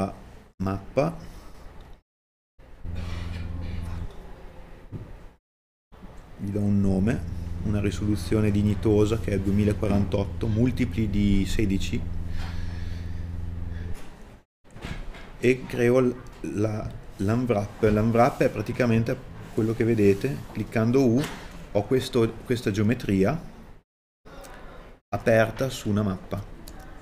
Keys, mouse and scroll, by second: 10.2-11.9 scroll down 1.